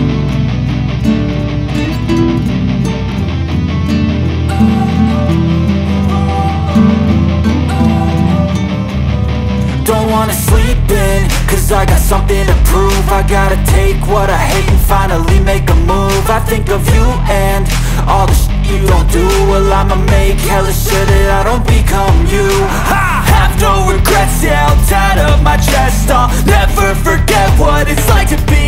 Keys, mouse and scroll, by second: 0.2-13.9 drag, 14.6 Delete, 15.6-25.7 drag, 28.4 ctrl+q.